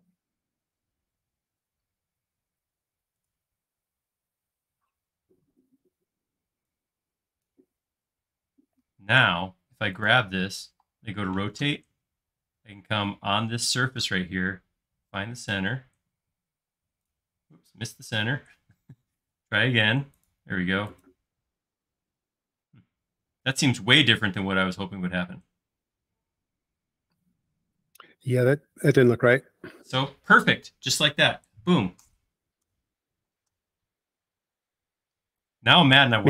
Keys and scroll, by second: 10.7 q, 17.9 Escape, 32.7 Escape, 33.4 space.